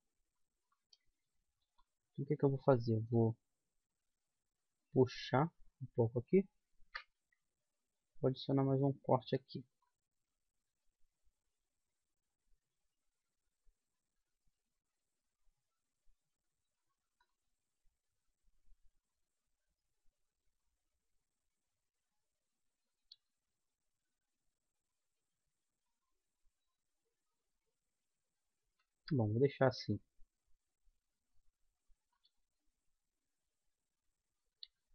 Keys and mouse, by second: 1.6 middle click, 2.6-4.4 right drag, 3.5 g, 7.2 ctrl+r, 8.4 click, 8.9-10.4 middle drag, 10.4-11.9 right drag, 11.1 g, 17.6-19.3 right drag, 17.8 g, 19.4 right click, 23.3-25.2 right drag, 23.5 g, 28.0-29.9 middle drag, 29.9-31.7 right drag, 30.2 g, 32.3 right click, 32.6 g, 34.8-34.9 right drag.